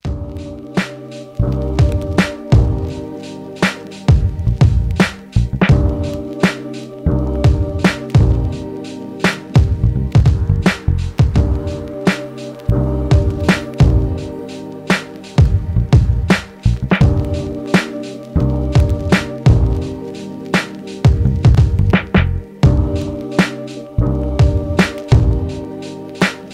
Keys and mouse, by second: 1.2 e, 7.4-10.7 alt+middle drag, 10.8 ctrl+j, 12.0 click, 13.8 ctrl+Tab, 15.2-26.5 drag, 17.8 ctrl+z, 20.3 ctrl+r.